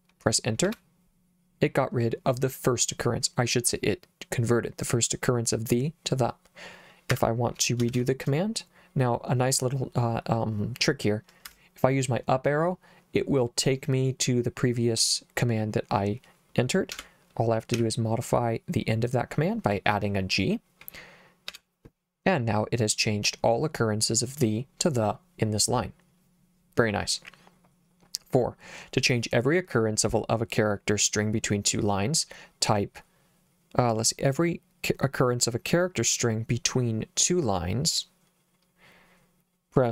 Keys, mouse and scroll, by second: 0.7 Return, 7.1 Escape, 7.9 shift+;, 11.5 Up, 17.0 /, 17.8 g, 21.5 Return.